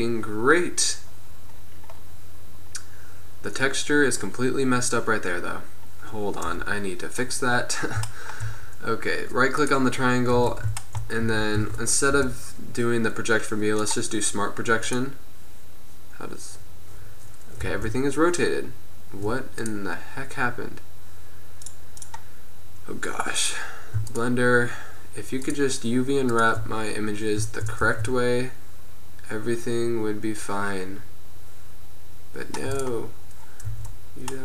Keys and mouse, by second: 2.1 middle click, 5.9 middle click, 6.5 KP_1, 10.0-10.3 middle drag, 10.7 Tab, 11.5 a, 11.7 a, 12.3 u, 16.1 middle click, 17.8 r, 21.8-28.0 middle drag, 28.0 r, 33.5-33.9 middle drag, 33.9 Tab, 34.1 middle click.